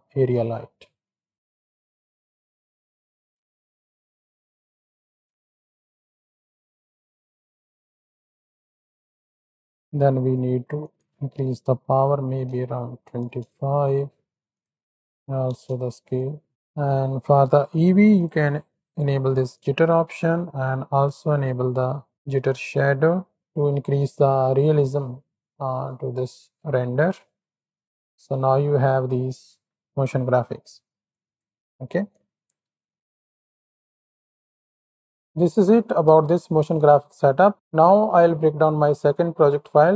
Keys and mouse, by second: 0.8 z, 1.3 alt+g, 1.6-3.3 drag, 3.4 middle click, 4.2-5.6 drag, 5.8 click, 7.2 click, 8.5 click, 10.9-13.3 drag, 14.6 click, 16.1 click, 16.2 middle click, 18.1 middle click, 19.6 middle click, 22.4 middle click, 25.3 shift+middle drag, 27.8 shift+middle click, 31.1 click, 31.1 middle click, 31.5 middle click, 32.1-33.8 drag, 36.2 ctrl+space, 38.2 click.